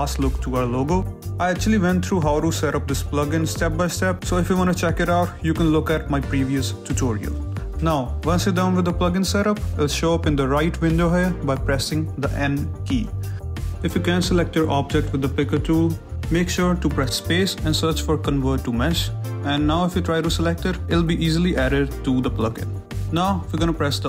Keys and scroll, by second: 6.2 alt+Tab, 7.0 n, 16.0 Escape, 16.7 space, 18.3 o, 18.5 v, 18.6 r, 18.8 t, 20.2 a, 20.9 n.